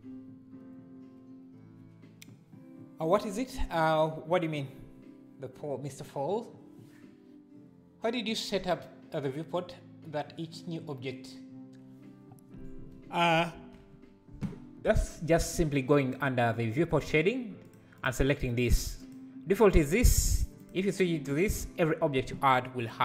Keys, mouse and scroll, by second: 17.7-19.1 drag.